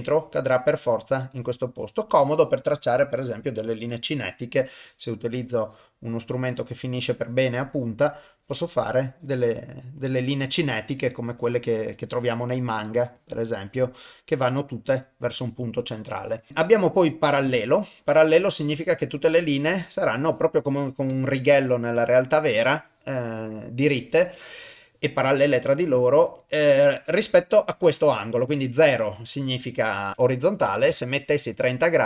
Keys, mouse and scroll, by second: 0.2 click, 0.9 click, 1.3 click, 1.8 click, 2.9-4.0 drag, 4.8 click, 5.6 click, 6.4 click, 7.1 click, 7.7 click, 8.4 click, 9.2 click, 10.0 click, 10.9 click, 11.4 click, 11.9 click, 12.7 click, 13.2 click, 13.7 click, 14.4 click, 14.9 click, 16.5-17.8 drag, 19.4 click, 19.8 click, 20.3 click, 20.7 click, 21.1 click, 21.7 click, 22.0 click, 26.2-28.8 drag, 29.8-31.2 drag, 31.5 click.